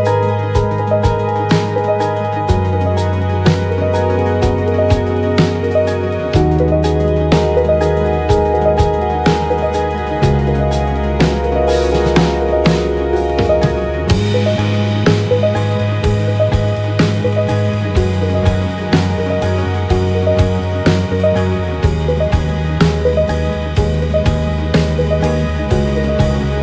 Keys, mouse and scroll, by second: 2.1-4.2 middle drag, 4.2-6.9 drag, 6.9 middle click, 7.3-9.4 drag, 9.4 middle click, 10.0 click, 10.4 middle click, 11.3 click, 12.3 shift+middle click, 13.2 click, 13.9-19.6 middle drag, 15.2 click, 16.2 click, 19.6 click, 19.7 middle click, 20.5-23.8 drag, 23.8-25.8 middle drag, 25.8 click.